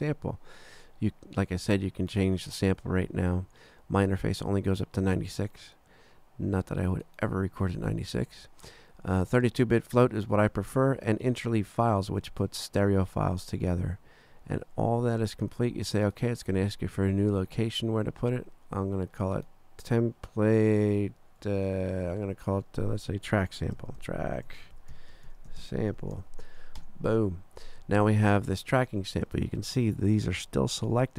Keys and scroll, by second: 21.0 BackSpace, 23.5-26.5 typing, 26.8 Return.